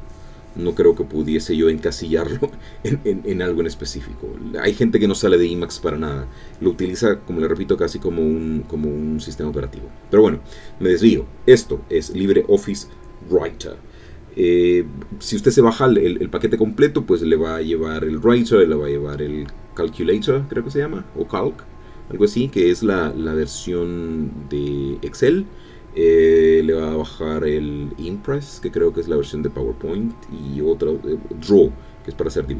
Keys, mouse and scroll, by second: 31.7 click.